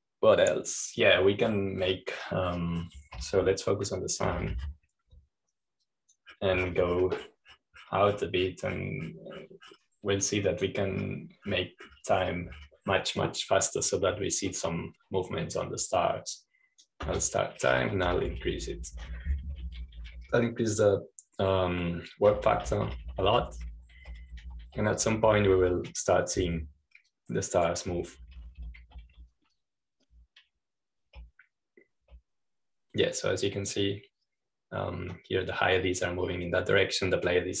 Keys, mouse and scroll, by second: 0.8 click, 5.2 f, 6.5 Escape, 6.5 typing, 7.7-8.8 drag, 8.6 typing, 8.8-12.1 scroll down 1, 12.1-13.3 drag, 13.0-15.4 scroll up 1, 17.3-19.3 right drag, 18.9 typing, 20.1-22.2 typing, 24.2-27.7 typing, 29.0-30.4 drag, 29.8-32.4 typing, 34.3-35.1 typing, 35.0-37.6 drag.